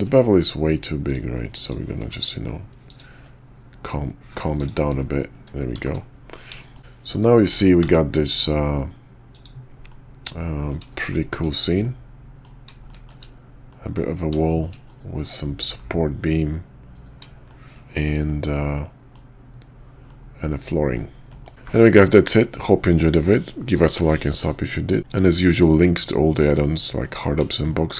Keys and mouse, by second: 1.0 click, 1.6 click, 2.0 q, 5.7 shift+2, 6.6 shift+middle drag, 6.9 middle click, 6.9 KP_5, 7.8 alt+v, 9.9-10.7 middle drag, 11.0 shift+middle click, 11.8-12.4 middle drag, 12.8 shift+middle drag, 13.7 middle click, 14.5 shift+click, 14.9-15.2 middle drag, 15.8-17.2 middle drag, 17.5-17.9 shift+middle drag, 18.2-19.1 middle drag, 20.1-21.0 middle drag, 21.3 shift+click, 26.4-27.0 middle drag, 27.7 shift+middle drag.